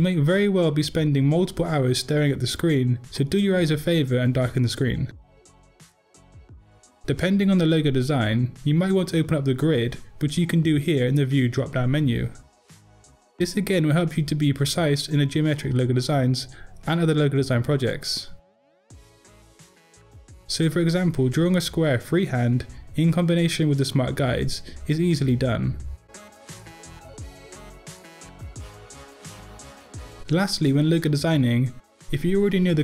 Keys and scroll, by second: 18.7 p.